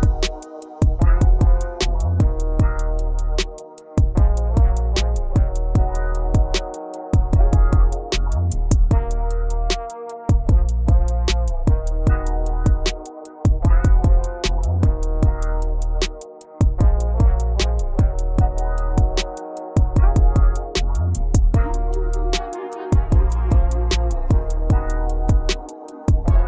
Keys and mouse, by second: 0.3 right click, 1.8 right click, 7.9 right click, 9.1-11.0 right drag, 14.2 KP_Subtract, 14.4 KP_Subtract, 14.9 KP_Subtract, 15.1 KP_Subtract, 16.6 KP_8, 19.7 right click, 22.6 e, 23.7 KP_Subtract, 24.8 z, 26.3 KP_4.